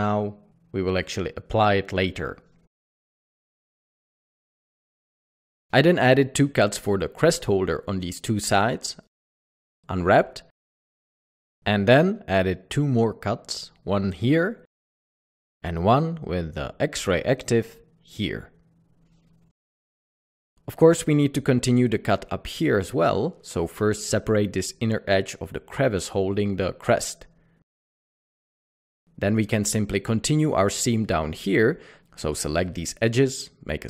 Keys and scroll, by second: 5.7 Tab, 9.2-9.8 typing, 13.6 typing, 16.1 ctrl+2, 16.6 typing, 24.4 q, 27.5-27.9 typing.